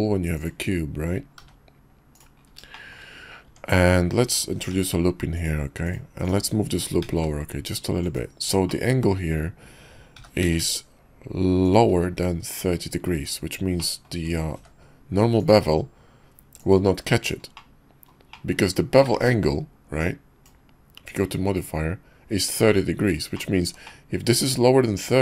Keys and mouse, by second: 1.3 g, 2.7 shift+middle drag, 3.4 Tab, 4.7 ctrl+r, 6.2 click, 7.0 g, 8.7 click, 8.8 middle click, 10.1 g, 13.1 Tab, 13.8 click, 14.5 q, 17.5-18.1 middle drag, 18.3-18.7 shift+middle drag, 19.1 ctrl+`, 23.8 click.